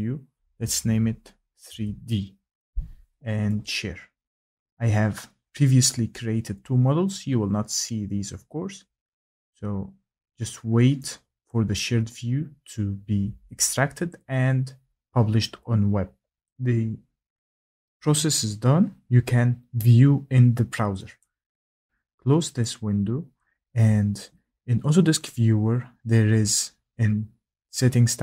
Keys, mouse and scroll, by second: 0.3 3, 0.6 Caps_Lock, 0.8 d, 1.6 Caps_Lock, 7.6 click, 11.0 click, 11.5-16.3 drag, 16.4-18.7 drag, 21.2 click, 22.4 click, 22.6 click.